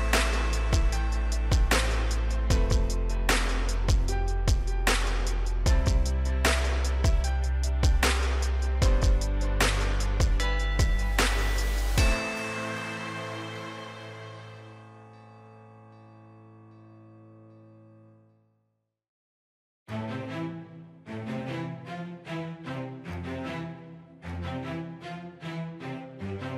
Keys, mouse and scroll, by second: 4.2 right click, 5.4 click, 5.9 right click, 6.6 click, 17.4 right click, 18.4 click.